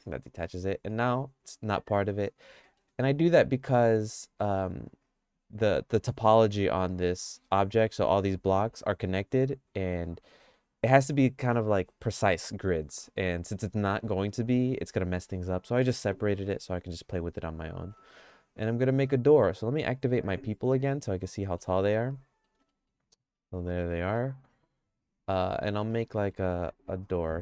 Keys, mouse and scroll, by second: 0.5 g, 2.6 middle click, 3.1-4.6 middle drag, 16.2 g, 18.0 middle click, 18.3-19.3 shift+middle drag, 21.4 middle click, 21.9 shift+middle click, 22.7 middle click, 23.7 middle click, 24.1-25.7 shift+middle drag, 25.9 middle click.